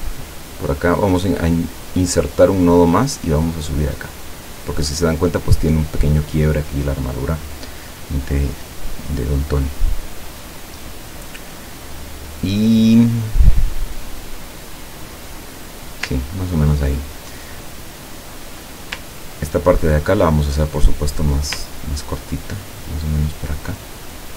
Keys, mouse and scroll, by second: 2.2 click, 3.2-4.7 drag, 16.4 ctrl+scroll down 2, 19.2-19.5 ctrl+scroll down 2, 20.1 ctrl+click, 21.6-24.3 ctrl+drag.